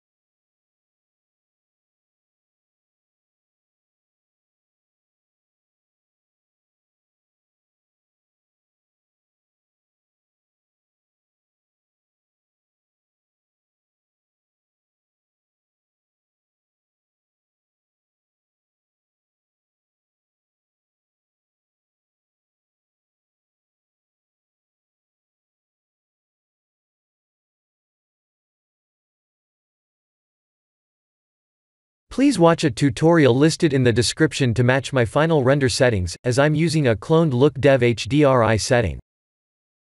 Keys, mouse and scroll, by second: 0.7 KP_1, 1.0 KP_7, 2.1 shift+d, 8.1 ctrl+z, 9.1 shift+d, 11.3 g, 14.7 middle click, 14.9 middle click, 15.3 middle click, 16.5 middle click, 17.9 middle click, 18.2 middle click, 18.4 middle click, 18.6 middle click, 18.8 middle click, 19.0 middle click, 19.2-20.1 middle click, 19.9 middle click, 20.4 middle click, 20.9 click, 21.3-21.7 shift+middle click, 21.6 middle click, 21.8 middle click, 24.4 middle click, 24.4 middle click, 24.6 middle click, 24.6 middle click, 24.7 middle click, 24.8 middle click, 24.9 middle click, 24.9 middle click, 25.7 middle click, 27.3 click, 27.4 x, 28.2-28.7 scroll up 3, 29.1 middle click, 29.6-30.1 middle click, 29.9 middle click, 30.1 middle click, 30.6 middle click, 31.4 scroll down 1, 31.8 middle click, 32.9 shift+middle click, 33.1 shift+middle click, 33.4 middle click, 33.6 shift+middle click, 34.4 middle click, 34.6 middle click, 35.1 ctrl+alt+KP_0, 35.7 shift+`.